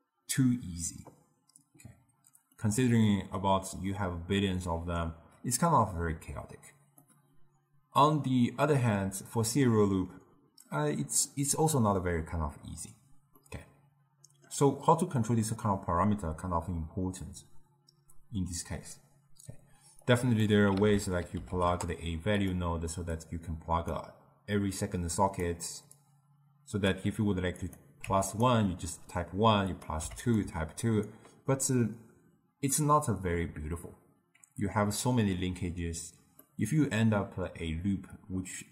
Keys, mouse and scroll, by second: 2.4-5.5 middle drag, 6.9-10.0 middle drag, 13.3-16.4 middle drag, 19.9-22.4 drag, 23.1-28.4 drag, 29.6 click, 36.4-38.7 middle drag.